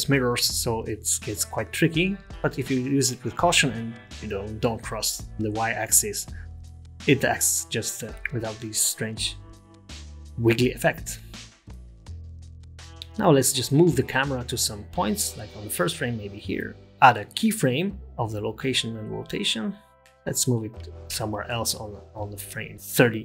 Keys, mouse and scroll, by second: 1.1 scroll down 1, 1.1 g, 2.4 g, 8.0 click, 8.2 click, 9.5 middle click, 17.4 i, 22.2 space, 22.7 space.